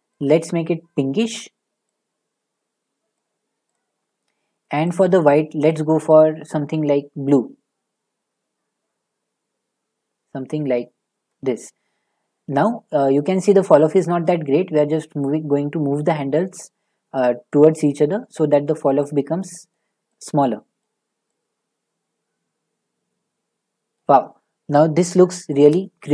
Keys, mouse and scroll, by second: 1.2 click, 3.1 click, 3.7 click, 4.9 click, 5.7 click, 11.3 click, 12.8 middle click, 13.2 middle click, 13.3 middle click, 16.6 click, 18.3 click, 20.8 click, 24.2 click, 24.2-26.1 scroll.